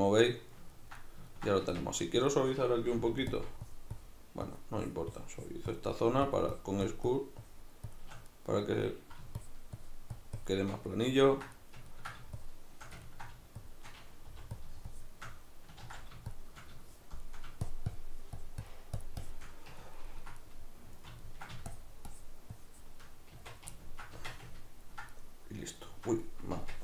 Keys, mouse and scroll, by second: 1.7 Tab, 2.9 f, 3.7-8.3 shift+drag, 8.3-9.4 middle drag, 9.4-10.9 shift+drag, 10.9-12.4 middle drag, 12.4 shift+click, 13.0 ctrl+middle click, 13.6-14.6 shift+drag, 14.2 f, 14.9-16.8 shift+drag, 15.8 ctrl+z, 16.8 shift+middle click, 17.6-19.8 shift+drag, 19.8-21.7 ctrl+middle drag, 21.7-23.8 shift+drag, 23.3 Tab, 23.8-26.8 ctrl+middle drag, 24.1 Tab, 26.6 Tab.